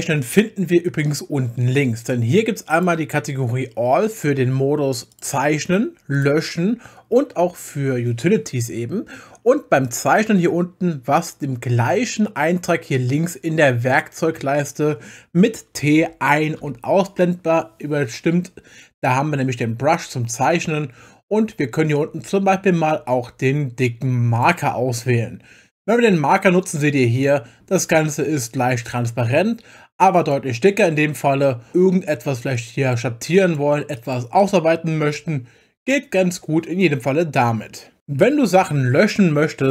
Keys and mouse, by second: 2.7 click, 5.1 click, 6.1 click, 7.6 click, 9.8 click, 12.9 click, 16.0 t, 16.6 t, 24.3 click, 26.3 click, 32.5 click, 33.3-34.4 drag.